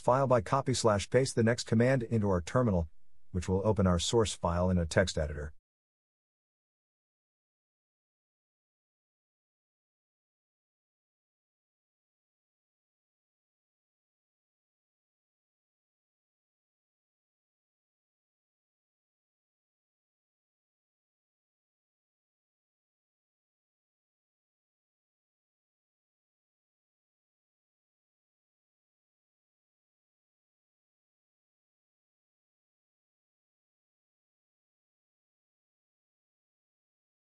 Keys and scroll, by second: 19.0 Return, 36.8 Return.